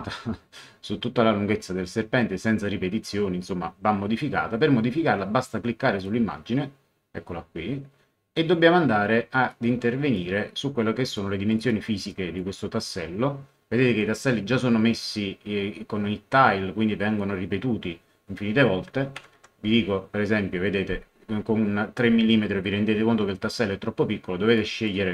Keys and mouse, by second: 6.0 click, 9.5 click, 11.1 click, 19.1 KP_3, 19.3 Tab, 24.5 click.